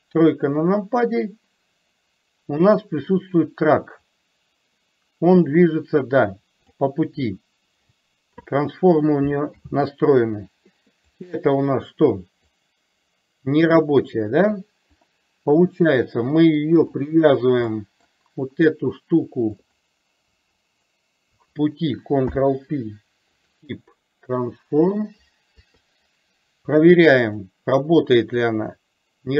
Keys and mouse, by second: 2.7 click, 4.2-7.0 drag, 9.6 ctrl+z, 11.3 click, 12.7-14.7 drag, 16.1-16.6 middle drag, 17.7-18.2 middle drag, 19.7 click, 20.8 shift+click, 22.3 ctrl+p, 25.6 KP_3, 27.5 click, 28.6-29.3 drag.